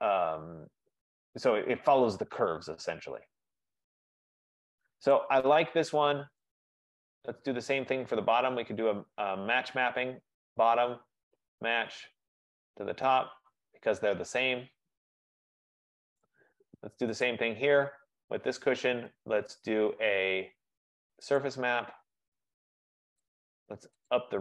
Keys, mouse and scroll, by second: 2.2-3.4 scroll, 5.6 middle click, 5.6 right click, 6.5 middle click, 7.3 right click, 9.6 click, 10.1 click, 11.8 click, 12.7 right click, 13.3 click, 14.1 click, 16.3 right click, 16.8-17.2 scroll, 17.2-17.6 scroll up 3, 17.9 click, 18.8-19.5 scroll down 5, 21.5 middle click, 21.5 click, 23.4 click, 24.2 click.